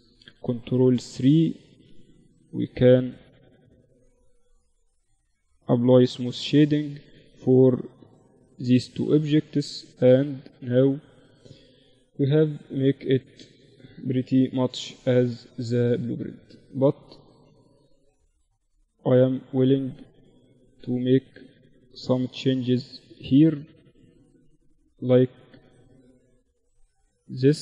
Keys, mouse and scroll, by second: 0.1 Tab, 1.3 ctrl+r, 3.1 ctrl+r, 4.1 Tab, 4.9 t, 5.5-8.7 drag, 5.7 t, 6.1-7.8 right drag, 6.9 t, 7.5 t, 8.5 z, 8.7-13.2 middle drag, 8.7 z, 13.2 KP_1, 15.7-17.1 right drag, 16.3 KP_7, 17.1 middle click, 17.7 Tab, 18.1 middle click, 19.0 click, 19.4 click, 19.5 a, 19.7-23.1 drag, 19.9-20.9 right drag, 21.1 right click, 21.8 a, 22.1 right click, 23.8 a, 25.3 a, 27.3 click, 27.3 right click.